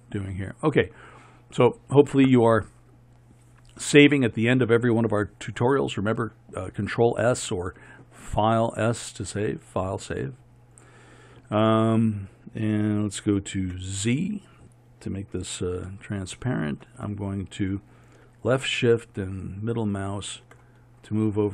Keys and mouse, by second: 13.7 z, 19.1-21.5 middle drag.